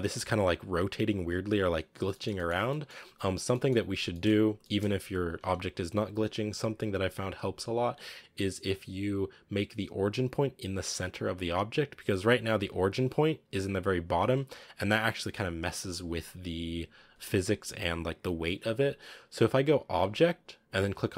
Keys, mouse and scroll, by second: 2.0-2.4 middle drag, 2.4 scroll up 2, 2.6-3.2 middle drag, 3.2 scroll down 1, 3.4-3.8 middle drag, 3.8 scroll down 1, 4.0-5.2 middle drag, 5.2 r, 12.4 r.